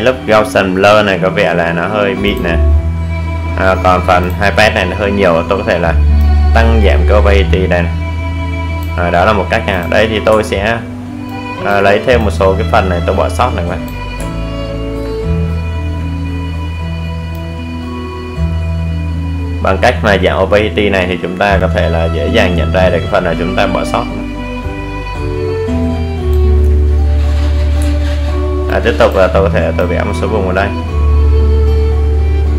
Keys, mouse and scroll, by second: 7.2-7.6 scroll up 1, 7.9 alt+right click, 8.8 click, 11.4-12.1 alt+scroll down 1, 14.6-25.2 drag, 25.9-26.4 alt+scroll up 1, 26.8 alt+right click, 27.9 click.